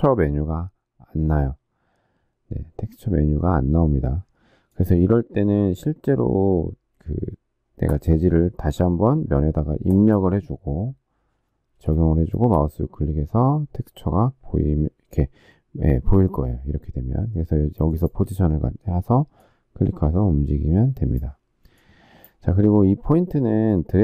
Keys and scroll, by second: 11.6 space.